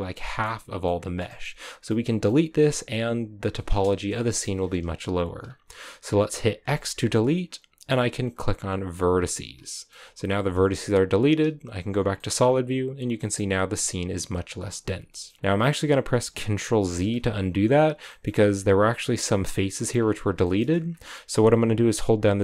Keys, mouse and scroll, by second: 2.8-4.2 scroll up 1, 4.2 KP_0, 5.4-7.0 scroll up 3, 8.8 x, 9.6 shift+middle click, 9.8-11.4 scroll up 2, 11.4 z, 11.8 scroll down 3, 12.1 shift+middle click, 12.2-13.1 scroll up 4, 13.1 shift+middle click, 13.4-14.6 scroll up 4, 14.6-15.0 scroll down 3, 15.0-16.9 shift+middle drag, 16.9 ctrl+z, 17.8-19.9 scroll up 4, 18.0 shift+middle click, 19.9-20.4 scroll down 7, 20.4 shift+middle click, 20.6-22.4 scroll up 3.